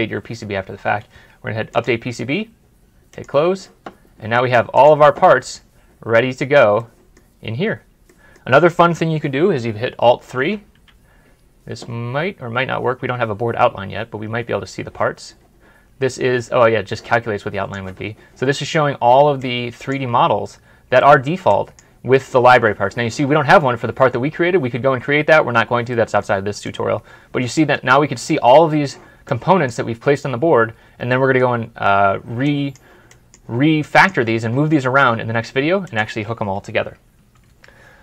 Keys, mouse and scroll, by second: 5.2 double click, 5.6-6.0 scroll up 1, 6.6 scroll up 1, 6.8 middle click, 7.2 scroll up 1, 7.5 scroll down 1, 8.0 middle click, 10.2 middle click, 10.7 alt+3, 18.4 alt+3, 18.8-20.0 scroll up 1, 20.0-20.4 scroll down 1, 20.4-20.9 scroll up 1, 20.9 middle click, 24.5-24.8 scroll down 1, 24.8-25.7 scroll up 1, 25.8 scroll up 1, 25.9 middle click, 29.8-30.3 scroll down 1, 30.3-30.7 scroll up 1, 30.7 scroll down 1, 31.2 middle click, 31.4 scroll up 1, 31.7-32.4 scroll down 1, 32.4 scroll down 1, 37.2 scroll down 1, 37.4 ctrl+F11.